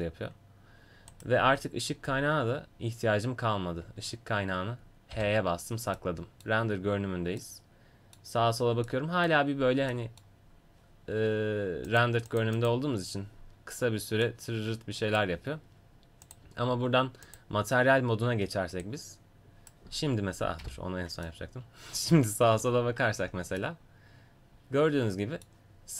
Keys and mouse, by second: 2.2 g, 5.1 h, 6.0-8.4 middle drag, 11.9-16.6 drag, 20.0 right click, 21.3-22.5 middle drag, 23.2 a, 23.6-24.9 middle drag.